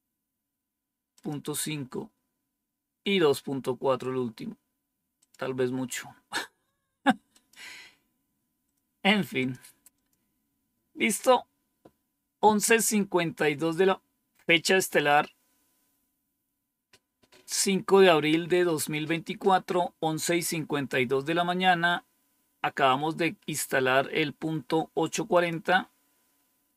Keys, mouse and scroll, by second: 1.0 click, 5.1 click, 6.2 click, 7.2 click, 8.5-10.6 drag, 25.2 click.